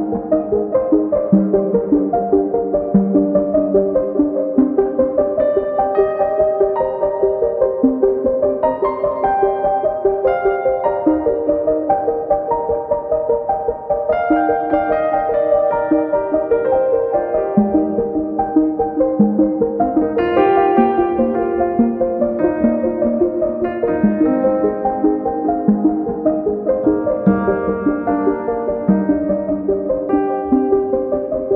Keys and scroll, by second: 1.0 super+c, 1.3 super+v, 3.9-4.8 typing, 6.0-10.1 typing, 24.0-25.4 typing, 25.5 Return, 26.6-27.3 typing.